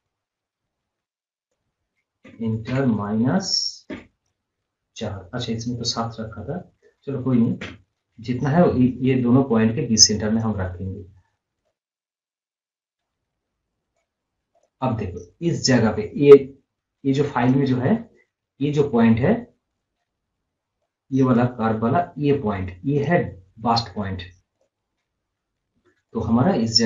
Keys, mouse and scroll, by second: 10.4-14.6 drag, 17.4 click, 20.9-24.6 drag.